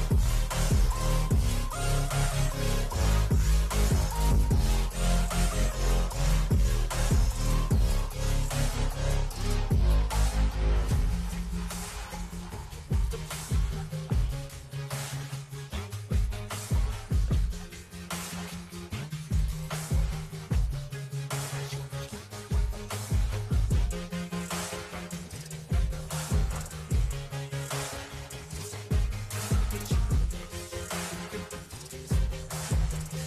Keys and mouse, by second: 0.0 shift+Left, 3.0 shift+Left, 3.4 shift+Right, 3.7 shift+Left, 4.0 shift+Left, 5.0 Right, 5.7 ctrl+j, 6.6 shift+Right, 14.0 shift+Left, 17.2 ctrl+click, 19.5 shift+click, 20.9 ctrl+g, 21.9 click, 22.8-24.3 typing, 24.5 Left, 24.6 Left, 25.0 Left, 25.9 Left, 26.2-29.8 typing, 30.9 click, 31.2 click, 33.1 click.